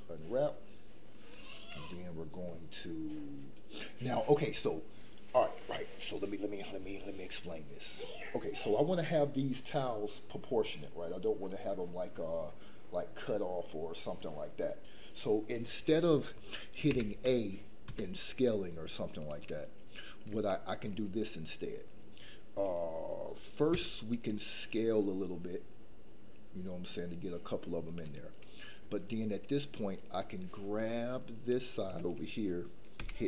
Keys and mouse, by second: 16.9 a, 17.8 s, 20.5 shift+click, 23.7 s, 30.2-31.5 drag, 32.9 g.